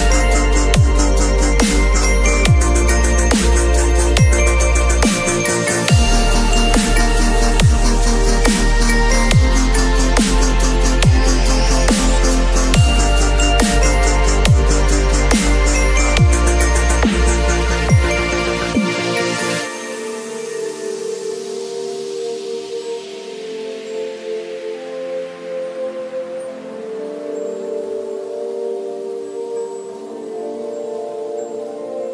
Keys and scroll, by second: 2.2 v, 5.9 ctrl+u, 11.5 ctrl+c, 11.6 ctrl+w, 12.6 ctrl+v, 16.1 alt+shift+m, 20.7 b, 21.9 ], 29.1 v, 31.0 space.